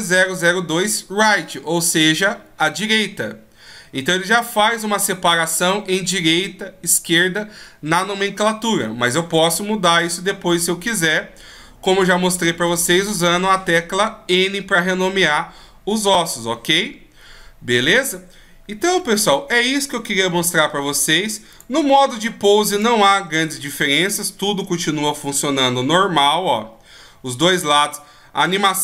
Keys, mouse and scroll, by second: 4.3-4.9 scroll down 2, 11.7 shift+scroll up 1, 12.9-14.9 scroll down 1, 21.1 click, 22.4 click, 24.7 g, 28.3 right click.